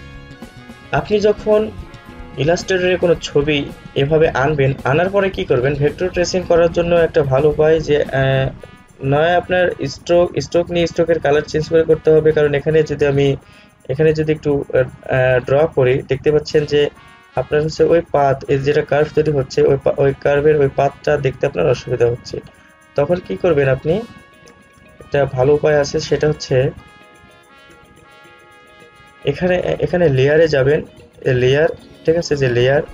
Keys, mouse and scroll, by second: 13.6-13.9 alt+scroll up 1, 15.2-24.6 drag, 24.6 ctrl+z, 26.5 alt+scroll down 1, 27.9 space, 28.0 click, 28.4 space, 30.4 click.